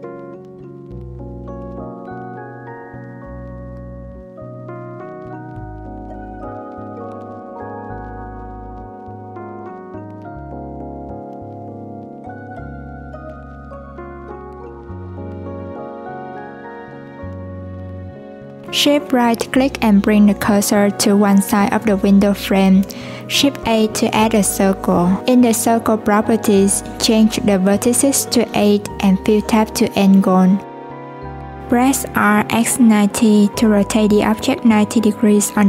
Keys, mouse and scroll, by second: 0.2 click, 1.9 click, 2.7 click, 4.4 click, 4.8 shift+click, 5.2 shift+click, 5.8 shift+click, 7.2 shift+click, 7.8 alt+z, 8.7 Tab, 9.8 click, 11.9 click, 15.1 Tab, 16.5 alt+z, 17.2 click, 20.1 shift+right click, 21.0 shift+a, 24.3-26.2 drag, 26.5-30.8 drag, 30.8 r.